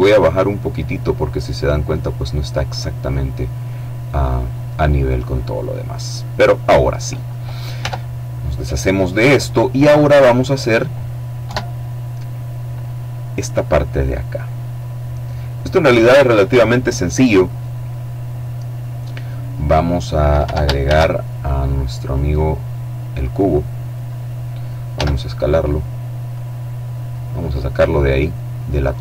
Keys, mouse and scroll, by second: 2.0-2.4 scroll down 1, 2.4 click, 7.2 Tab, 7.6-8.2 scroll down 1, 8.2 middle click, 9.3 middle click, 10.8 KP_7, 17.2-19.9 middle drag, 20.2 ctrl+shift+a, 21.3 click, 22.5-24.1 drag, 24.3 s, 25.7 click, 26.5 middle click, 27.6-28.8 drag, 28.6 middle click.